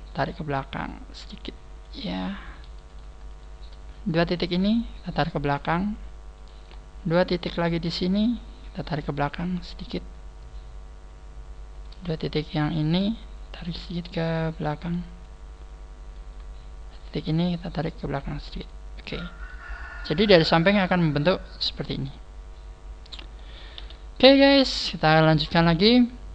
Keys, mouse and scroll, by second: 0.1 click, 2.4-3.1 scroll up 2, 2.9 right click, 3.3 shift+right click, 4.2 click, 6.4 right click, 7.5 shift+right click, 8.6 click, 11.8 right click, 12.6 shift+right click, 14.4 click, 16.0 right click, 17.0 shift+right click, 18.1 click, 19.4 middle click, 23.8 KP_1, 24.2 scroll down 2, 24.9-25.6 scroll down 4, 25.4-25.8 scroll up 4.